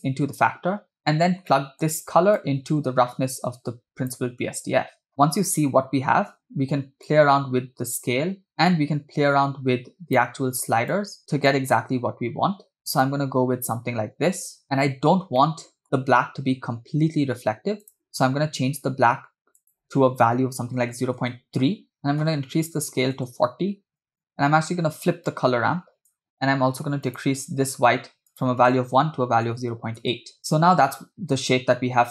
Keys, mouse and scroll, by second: 1.5 middle click, 2.4-4.6 drag, 7.1-10.4 drag, 11.1 click, 11.2 click, 11.7-12.8 drag, 13.2-14.6 drag, 15.4 scroll up 2, 15.6 middle click, 16.0 scroll up 2, 17.9 click, 18.2 click, 22.0-23.4 drag, 23.9-25.3 drag, 26.0 click, 27.2 click, 30.4 space.